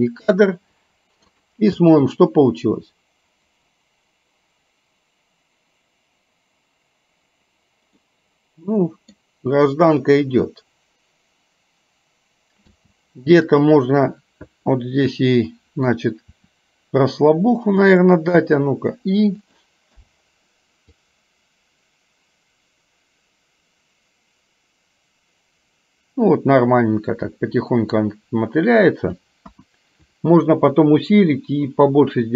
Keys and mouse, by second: 1.4 click, 1.9 space, 8.1-9.5 middle drag, 12.7 space, 13.6 click, 15.6 middle click, 16.4 r, 18.5 r, 20.0 i, 21.1-29.2 drag, 29.5 KP_1.